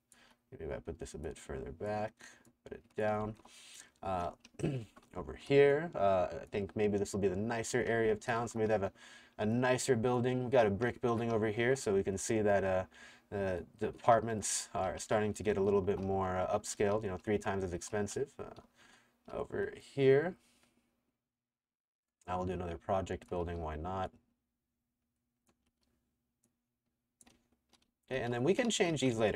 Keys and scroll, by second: 0.0-0.2 typing, 3.2-5.7 typing, 7.7-8.9 typing, 10.5-12.1 typing, 13.8-19.4 typing, 23.4 r, 25.7 t, 27.1-29.3 typing.